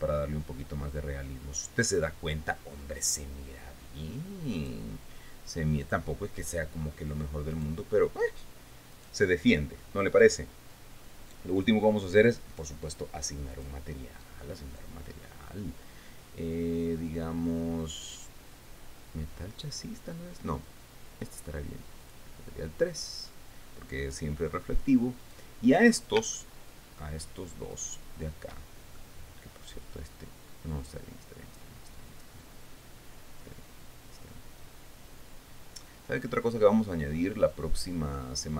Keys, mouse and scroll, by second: 0.1 click, 5.1 click, 6.3 click, 7.3-7.7 scroll up 1, 8.1 right click, 9.5 right click, 10.7 right click, 12.1 click, 14.1 click, 22.6 click, 25.7 right click, 26.9 shift+middle click, 28.3 shift+right click, 29.5-38.5 shift+middle drag.